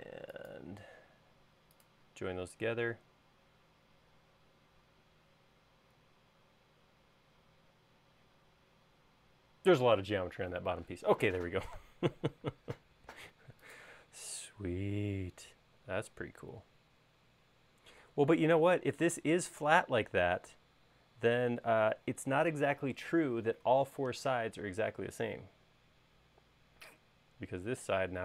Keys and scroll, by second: 12.5 space.